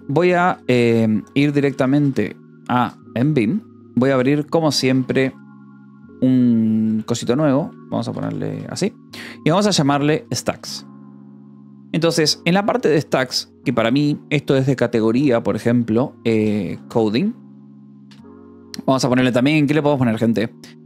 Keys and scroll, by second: 0.0-2.7 typing, 3.1 Return, 3.7-6.8 typing, 4.8 Escape, 7.2 Escape, 8.1 space, 8.1 o, 8.4 n, 9.8-11.1 typing, 12.1 k, 12.8 e, 13.4 l, 13.8 a, 16.1-18.6 typing.